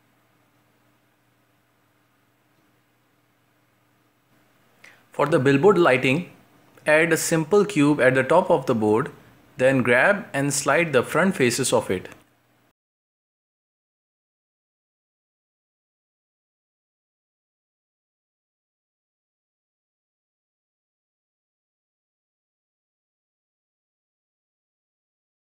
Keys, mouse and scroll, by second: 0.0-0.5 middle drag, 0.5 scroll up 1, 0.7 g, 1.2 scroll down 3, 1.3 shift+middle drag, 1.5 scroll up 1, 1.6-3.3 shift+middle drag, 3.7-4.3 drag, 4.3 shift+a, 6.0 s, 7.1-7.8 middle drag, 7.8-9.5 scroll up 2, 9.5 middle click, 9.8-10.3 scroll up 1, 10.3-10.8 middle drag, 10.8 s, 12.1 Tab, 12.4-13.0 scroll up 1, 13.0 right click, 13.3 shift+right click, 13.8 shift+right click, 14.1 g, 15.2-15.7 scroll down 2, 15.7 ctrl+z, 16.3 shift+Tab, 16.6 g, 17.7 middle click, 18.1-19.3 scroll down 1, 19.3 shift+middle click, 19.8 a, 24.5 middle click, 25.2 scroll up 1, 25.3 shift+middle click.